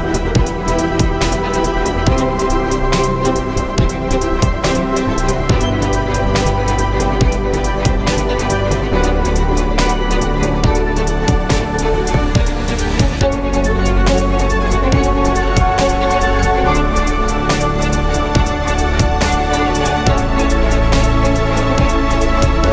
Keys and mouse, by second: 1.9 shift+d, 7.2 z, 8.1 KP_3, 8.9 z, 9.4 z, 12.6 z, 12.9 c, 14.2 z, 18.4 p, 19.1 Tab, 21.3 z, 22.1 z.